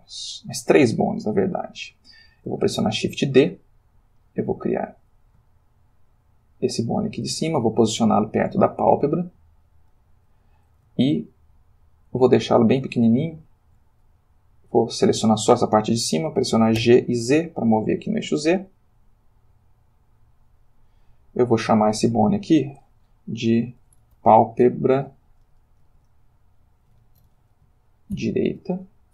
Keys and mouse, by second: 2.7 shift+d, 4.9 click, 5.5-7.6 shift+middle drag, 9.8 click, 11.4-12.4 shift+middle drag, 13.1 shift+middle click, 14.1 click, 16.8 g, 17.3 z, 20.8 click, 21.4 click, 22.6 F2, 23.8-25.4 typing, 26.9 p, 27.2 r, 27.3 a, 28.1 shift+d.